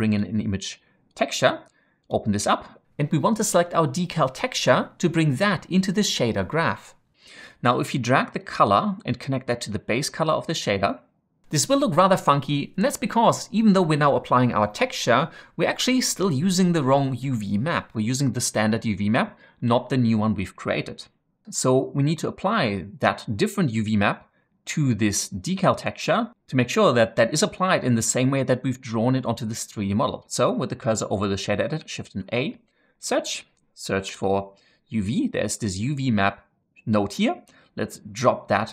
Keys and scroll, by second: 32.1 shift+a, 33.9 typing.